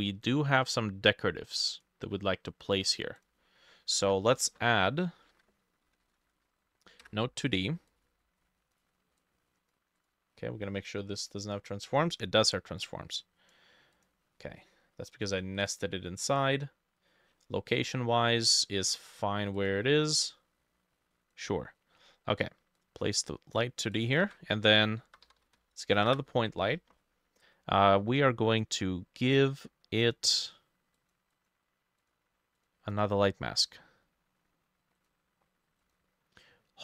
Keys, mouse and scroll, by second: 3.2 double click, 3.4 ctrl+middle click, 4.0 ctrl+a, 4.0 middle click, 4.6 Escape, 5.3 ctrl+middle click, 5.4 ctrl+a, 5.7-7.0 typing, 7.1 Return, 15.6 double click, 24.3 ctrl+a, 25.1-26.1 typing, 26.1 Return, 27.6-28.5 scroll down 2, 31.4 double click, 32.9 scroll up 2.